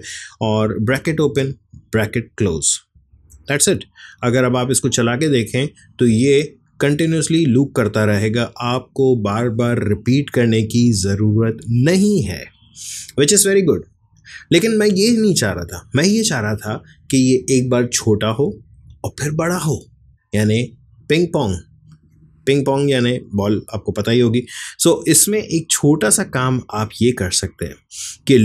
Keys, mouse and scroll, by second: 4.5 click, 6.1 space, 25.5 click.